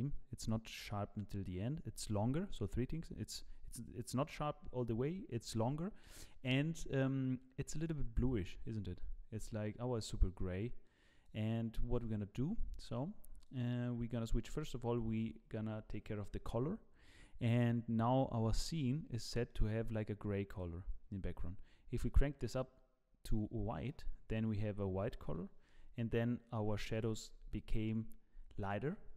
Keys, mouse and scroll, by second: 13.4 click, 18.5 middle click, 18.9-19.5 scroll down 10, 19.5 middle click, 20.5 click, 23.9 middle click, 24.5 scroll down 1, 25.3 KP_0.